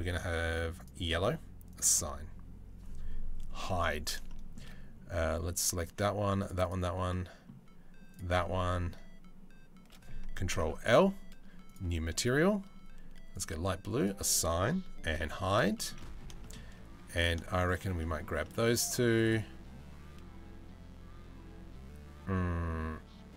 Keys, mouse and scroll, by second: 1.3 click, 3.2 h, 3.9 shift+middle click, 5.4 click, 6.0 shift+middle click, 7.7 shift+middle click, 8.0 shift+middle click, 10.1 ctrl+l, 11.3-13.0 drag, 13.6 middle click, 14.8 h, 15.4 shift+middle click, 15.6 middle click, 16.0 shift+middle click, 17.6 shift+middle click, 18.9 shift+middle click.